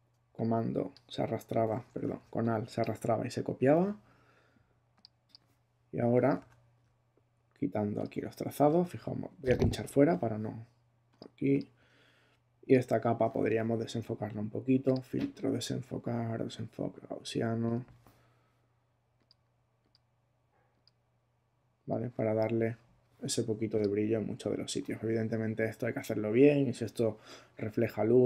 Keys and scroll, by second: 1.9 super+z, 6.4 super+z.